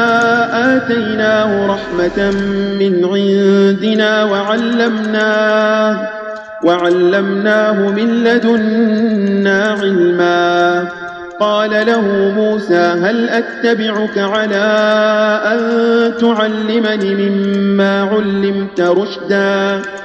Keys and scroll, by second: 6.7 space, 9.6 space, 13.2 space, 14.7 space, 16.8 space.